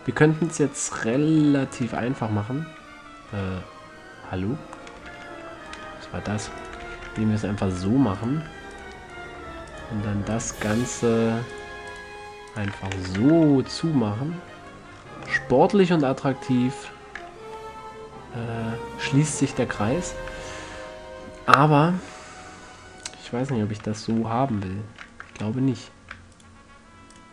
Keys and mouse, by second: 1.8 middle click, 2.5 f, 3.6-3.9 middle drag, 4.0 middle click, 5.6 ctrl+z, 7.0 click, 7.2 f, 7.4 a, 7.6-7.9 middle drag, 13.2 f, 13.4 a, 13.6 Tab, 13.8 middle drag, 14.4 middle drag, 14.6 middle click, 17.8-19.8 middle drag, 19.8 Tab, 20.6-21.1 middle drag, 21.2-22.0 middle drag, 22.5 middle drag, 24.2-24.9 ctrl+z.